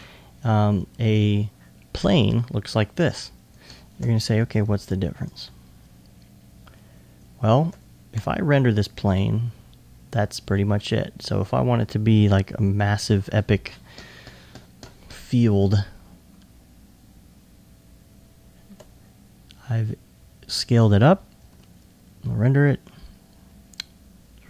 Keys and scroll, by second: 3.1 s, 12.3 typing.